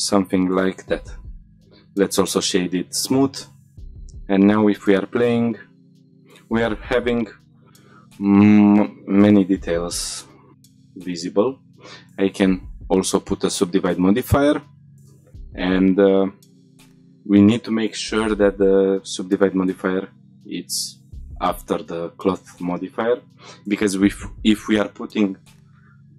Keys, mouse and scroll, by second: 0.0 Tab, 0.3-0.8 middle drag, 0.9 shift+middle click, 1.2 middle drag, 1.5 right click, 3.2 shift+middle drag, 4.5 click, 6.1 click, 8.7 click, 9.9 click, 13.9-15.9 scroll down 4, 15.9 scroll down 1, 16.6-17.3 scroll down 4, 17.2-18.6 scroll up 2, 18.6-20.1 scroll down 4, 20.1-20.7 scroll down 2, 20.7-21.6 scroll up 4.